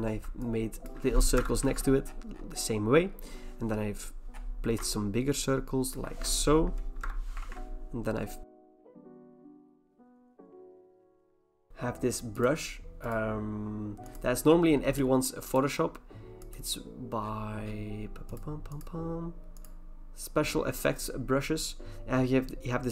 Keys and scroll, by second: 1.4 alt+BackSpace, 1.7 ctrl+d, 7.0 alt+BackSpace, 7.4 ctrl+d, 8.6 alt+BackSpace, 8.7 ctrl+d, 8.8 alt+BackSpace, 9.1 ctrl+d, 9.2 alt+BackSpace, 9.3 ctrl+d, 10.0 alt+BackSpace, 10.3 ctrl+d, 10.5 alt+BackSpace, 11.0 ctrl+d.